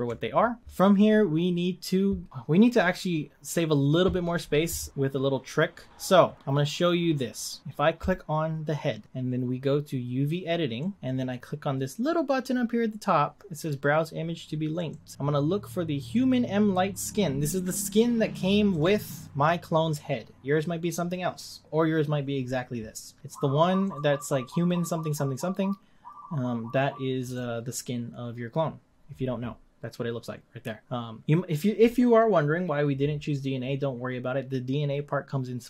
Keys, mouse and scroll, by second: 0.6-1.2 scroll up 3, 5.9-6.5 scroll up 1, 7.4-8.0 scroll down 1, 8.0 click, 10.8-24.0 drag.